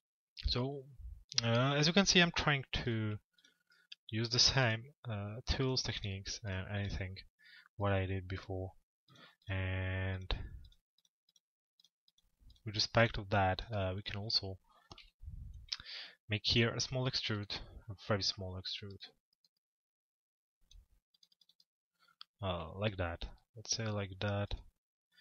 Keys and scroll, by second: 14.6 p.